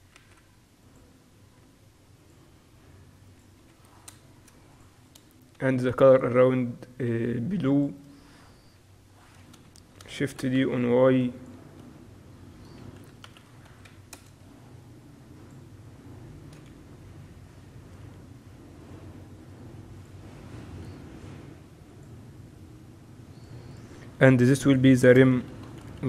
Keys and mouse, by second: 0.3 s, 1.9 s, 3.4-7.2 drag, 8.8 KP_7, 9.6 middle click, 10.4 shift+d, 10.4 click, 11.0-12.0 drag, 11.6 z, 12.2-14.2 drag, 13.0 r, 14.9-16.8 drag, 16.8 KP_3, 18.5 r, 21.4 g, 23.4-26.0 drag.